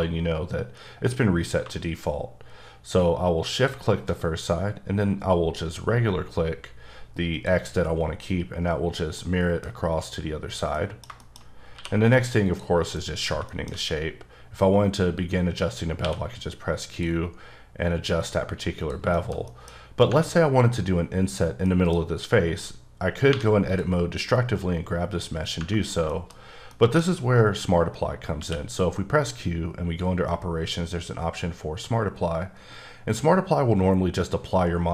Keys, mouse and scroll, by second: 1.6 x, 3.6 shift+click, 7.4 click, 9.2 scroll, 9.6 middle click, 9.7 scroll up 2, 10.3 scroll down 1, 10.7 middle click, 11.4-11.7 shift+scroll up 1, 11.7 q, 12.4 click, 13.0 middle click, 16.0 q, 16.7 click, 18.8 click, 19.1 shift+middle click, 20.1 Tab, 21.6 middle click, 23.7 click, 26.1 shift+middle click, 26.3-26.7 scroll down 1, 26.7 middle click, 27.0-28.2 scroll down 1, 28.3 q.